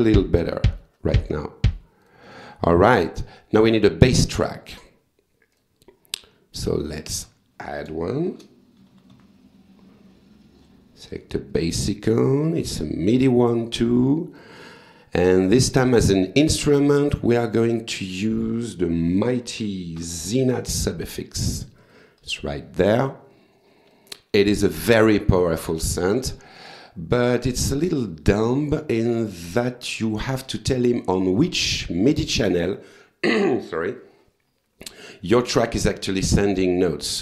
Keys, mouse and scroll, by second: 2.0 click, 4.7 right click, 5.5 click, 6.5 click, 8.1-9.4 typing, 10.6 click, 11.5 click, 12.6 click, 14.4 click, 15.8 click, 16.7 right click, 17.3 click, 19.0 z, 19.6 y, 20.0 n, 21.7 click, 23.9 click, 27.3-28.3 drag.